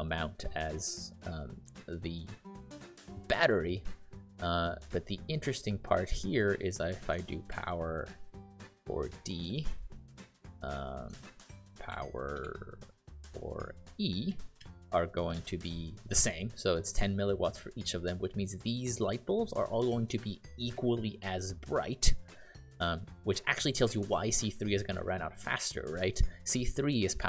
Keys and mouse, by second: 7.0-9.1 typing, 9.4 Return, 11.6-13.0 typing, 14.2 e, 14.5 shift+0, 15.3 Return, 15.8-16.5 typing.